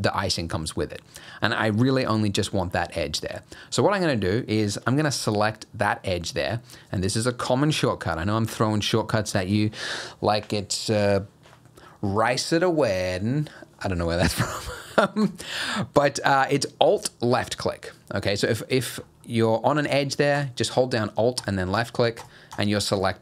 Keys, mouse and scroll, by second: 15.2 alt+click, 19.1-19.5 scroll up 2, 19.5 scroll down 1, 20.4 alt+click, 21.4 alt+click, 21.8 alt+click, 22.2 alt+click, 22.5 alt+click, 22.9 alt+click.